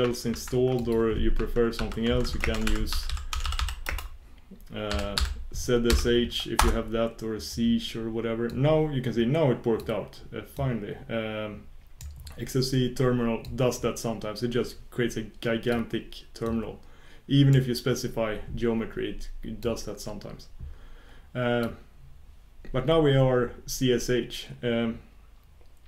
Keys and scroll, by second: 13.6 shift+super+q, 14.8 shift+super+q, 15.5 shift+super+q.